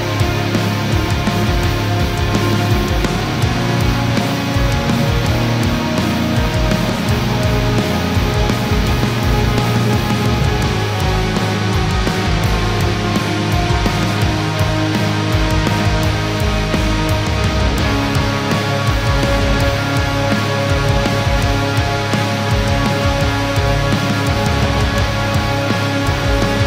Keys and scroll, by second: 5.5 ctrl+-, 7.3 ctrl+0.